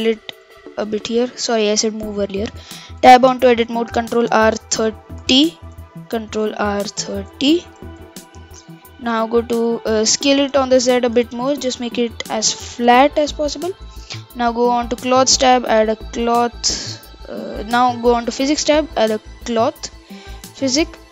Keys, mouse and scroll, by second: 1.2-3.0 middle drag, 3.0 Tab, 3.8 ctrl+r, 6.1 ctrl+r, 7.8 Tab, 10.3 s, 11.5 KP_1, 11.9-12.8 scroll up 5, 12.8 s, 14.8 click, 16.2 click, 16.6-19.7 drag, 19.9 scroll down 4, 20.6-21.1 scroll down 23.